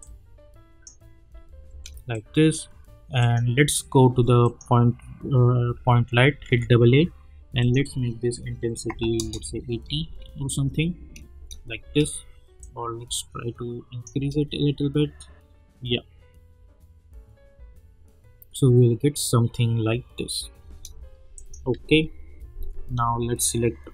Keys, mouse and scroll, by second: 0.0-1.3 drag, 1.3 space, 2.1 click, 6.5 typing, 7.6 click, 9.1 Return, 9.8 space, 12.6-14.1 drag, 14.1 space, 20.6 space, 21.3 click, 21.8 u.